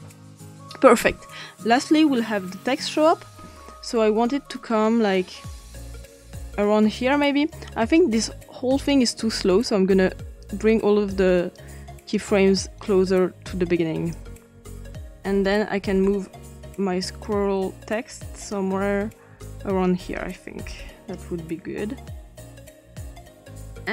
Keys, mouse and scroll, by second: 3.8-7.0 drag, 8.6 click, 10.5 click, 11.4 click, 12.8-13.9 drag, 17.0 click, 18.5 click, 20.2-22.6 drag, 22.7 click.